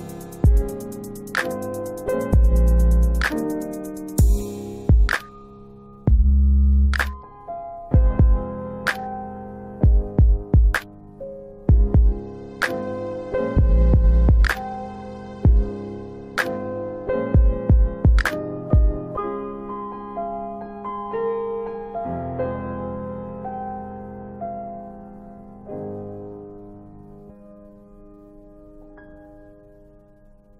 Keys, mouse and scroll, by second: 1.2 click, 2.5 click, 7.3 middle click, 8.7 click, 9.8 click, 12.6 middle click, 15.7 click, 17.2 middle click, 17.5 scroll up 2, 18.0 middle click, 20.2 F9, 23.0 1, 23.9 middle click, 26.1 click, 27.3 click, 28.4 click, 29.4 click.